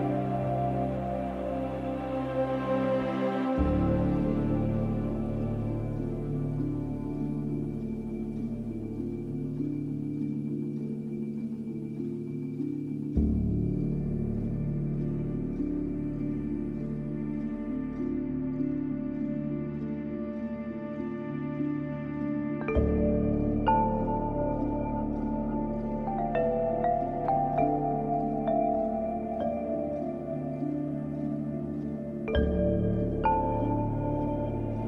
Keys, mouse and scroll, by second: 0.5 scroll down 1, 2.0-3.7 scroll up 1, 5.3 scroll up 1, 5.5 ctrl+shift+click, 6.4 ctrl+g, 6.9 click, 7.9-8.7 scroll up 1, 8.7 space, 8.9 click, 9.2 space, 9.8 ctrl+shift+e, 11.3 ctrl+a, 16.3-29.0 drag, 29.0 space, 29.2 click, 29.5 space, 29.8 space, 31.2 scroll down 1, 34.4-34.8 drag.